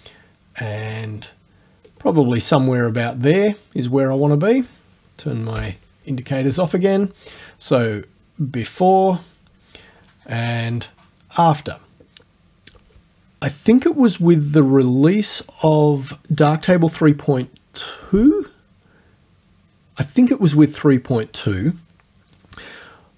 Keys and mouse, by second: 4.2 click, 5.6 o, 8.8 click, 10.6 click.